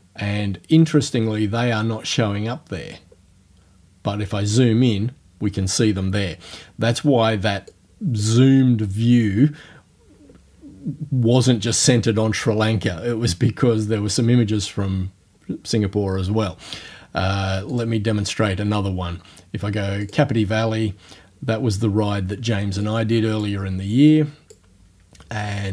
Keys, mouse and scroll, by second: 2.7 scroll up 1, 6.4-7.0 scroll down 3, 7.7 click, 17.8 click, 20.0 click, 22.9 click, 24.1 click.